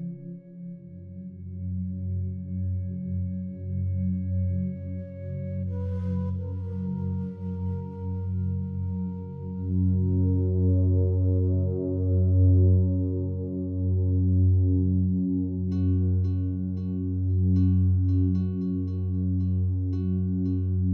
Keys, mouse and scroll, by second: 5.8-11.3 drag, 11.3 shift+right click, 14.0 click, 16.8 click, 18.6 a, 18.8 a.